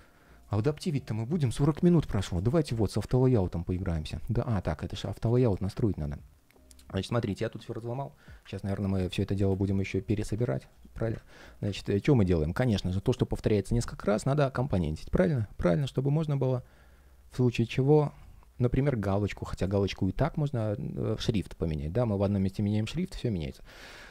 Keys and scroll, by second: 3.5 ctrl+shift+3, 6.7 ctrl+shift+3, 12.7 ctrl+shift+3, 18.4 ctrl+shift+3.